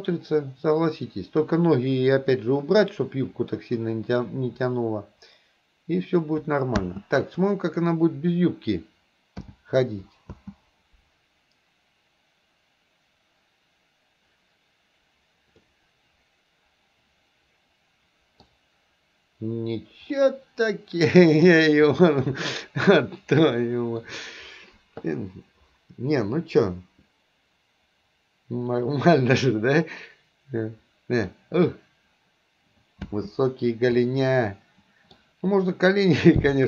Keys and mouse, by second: 6.9 space, 7.4 click, 9.5 h, 10.4 space, 15.7-18.6 middle drag, 20.2-21.5 middle drag, 22.0-24.2 middle drag, 29.2-31.4 middle drag, 33.2 space, 34.1-35.2 middle drag, 36.3 middle click.